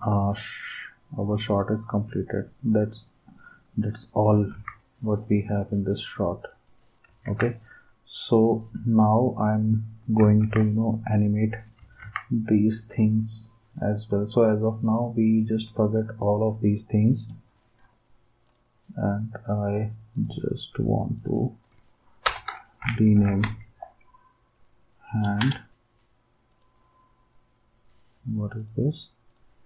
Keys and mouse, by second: 4.5 ctrl+s, 7.3 ctrl+s, 10.4 ctrl+s, 12.0 ctrl+s, 22.2 Return, 22.6-23.7 typing, 25.4 Return.